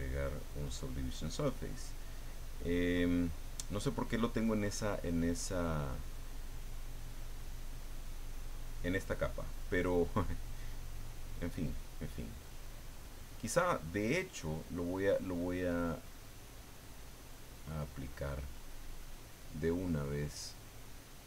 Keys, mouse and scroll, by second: 9.4-10.5 drag, 10.6-12.3 drag, 12.4-13.6 drag, 15.7 click.